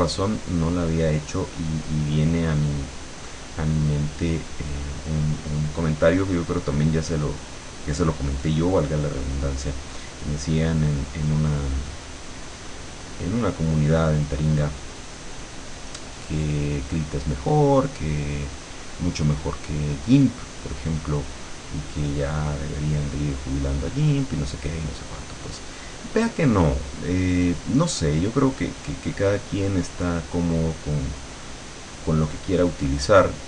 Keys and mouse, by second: 0.1 click, 1.1-5.6 drag, 6.3-11.3 drag, 11.8-14.1 drag, 18.0 click, 18.9-22.5 drag, 22.7-25.7 drag, 26.4 click, 27.7-28.7 drag, 30.3-33.4 drag.